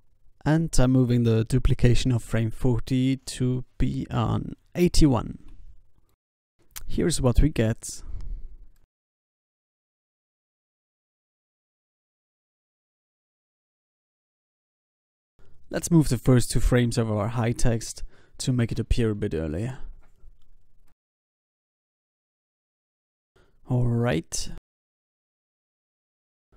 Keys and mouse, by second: 1.6 shift+d, 4.9 shift+d, 7.0 alt+a, 7.9 ctrl+s, 8.8 ctrl+s, 10.2 ctrl+s, 10.8 ctrl+s, 14.5 ctrl+s, 16.6 click, 16.7 b, 17.3 g, 21.0 g, 24.4 ctrl+s, 24.9 alt+a, 24.9 ctrl+s, 26.3 g.